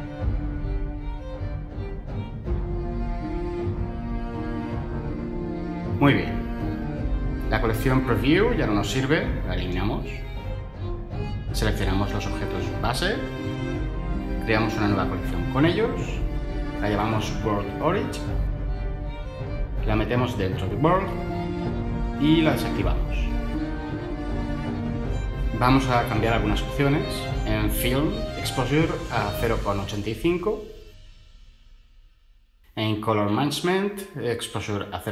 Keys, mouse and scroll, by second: 8.4 Delete, 16.7-19.3 typing, 17.6 click, 19.3 Return.